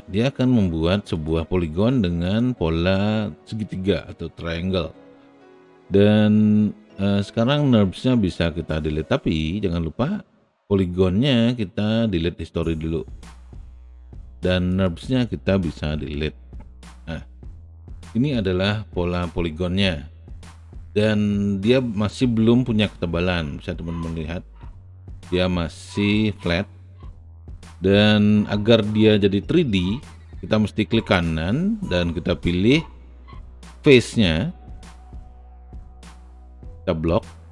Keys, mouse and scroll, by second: 16.1 Delete, 17.4 alt+click, 19.1-25.2 alt+drag, 25.8 alt+right click, 29.2 alt+click, 29.4 alt+click, 29.6 alt+click, 31.1-35.5 right drag, 37.1 click.